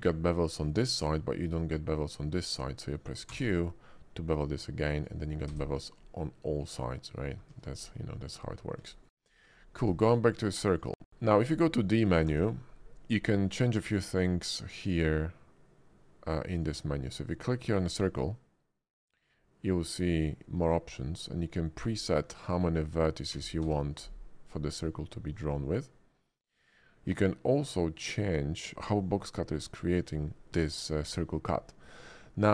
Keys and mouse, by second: 3.3 q, 5.0 click, 5.5 space, 6.0-7.2 drag, 7.5 ctrl+z, 8.1 click, 8.9 shift+click, 9.5 click, 12.3 d, 13.8 d.